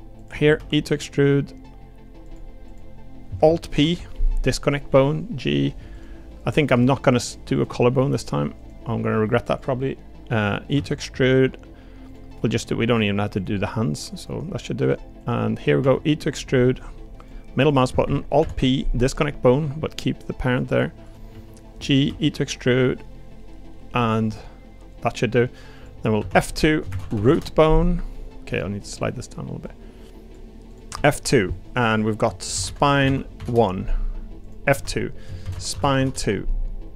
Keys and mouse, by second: 0.2 click, 0.6 e, 3.7 alt+p, 4.9 g, 6.7 g, 9.1 g, 10.7 e, 13.3 click, 13.7 g, 14.8 click, 15.2 click, 15.8 e, 17.6 click, 18.4 alt+p, 19.6 g, 21.3 g, 22.0 e, 26.2 F2, 27.1 o, 28.8 click, 29.6 click, 30.7 click, 30.9 F2, 34.4 click, 34.7 F2.